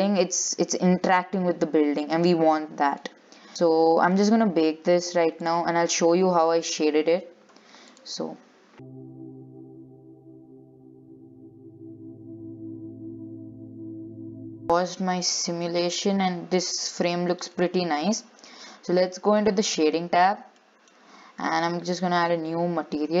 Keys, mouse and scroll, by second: 2.4-3.2 scroll down 14, 3.2-5.6 middle drag, 5.6 click, 6.1 click, 7.1-8.1 scroll down 8, 8.1-10.2 drag, 10.2 scroll down 20, 10.3 click, 10.6 ctrl+s, 10.7 scroll up 10, 10.8-14.6 drag, 14.6 scroll down 2, 15.2 Left, 15.6 scroll down 5, 15.8-17.4 middle drag, 17.4-17.8 scroll up 5, 17.8-19.7 middle drag, 19.7 click, 20.4-20.8 scroll down 8, 20.8 shift+middle click, 21.2-23.2 scroll up 6.